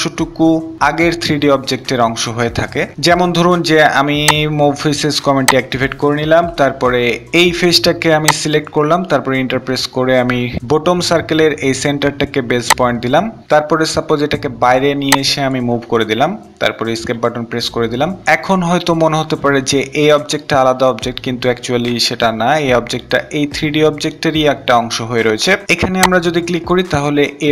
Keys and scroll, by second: 9.1 Return, 16.7 Escape.